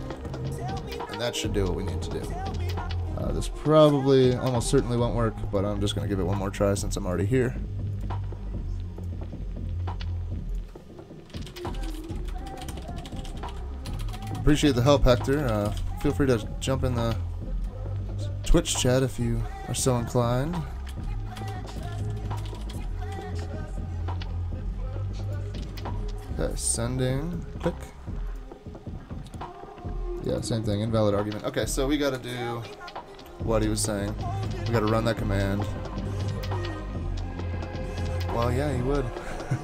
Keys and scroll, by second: 5.9 super+k, 11.1-16.5 typing, 20.9-23.6 typing, 25.6 super+k, 31.4 super+Tab, 32.2 super+Tab.